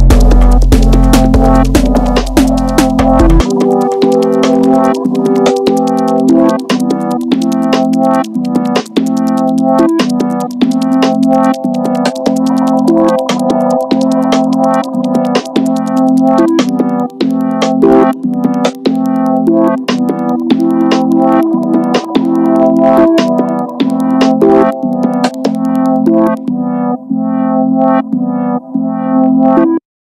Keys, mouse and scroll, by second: 0.2 KP_1, 0.6-1.2 shift+middle drag, 1.2 click, 1.8-3.5 middle drag, 3.5-3.9 scroll up 1, 3.9 Tab, 4.7 shift+middle click, 5.6 click, 6.4 KP_1, 7.2 click, 9.3 click, 11.4 Tab, 11.8-12.3 scroll down 3, 12.3-14.8 shift+middle drag, 14.8 KP_1, 15.6-16.0 scroll down 2, 16.0-16.6 shift+middle drag, 16.6-17.9 scroll up 4, 17.9 scroll up 1, 18.1 ctrl+s, 19.1-20.8 shift+middle drag, 20.8 click, 21.6 click, 24.1 Delete, 25.3 scroll up 1, 25.4-27.6 middle drag, 27.6 KP_1, 28.3-29.7 shift+middle drag, 29.7-30.0 scroll down 1.